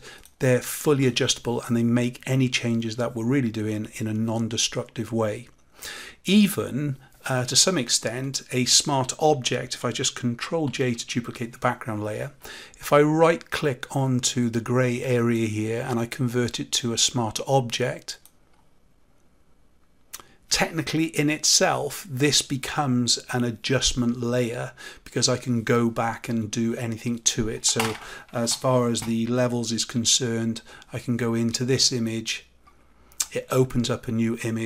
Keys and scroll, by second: 10.6 ctrl+j.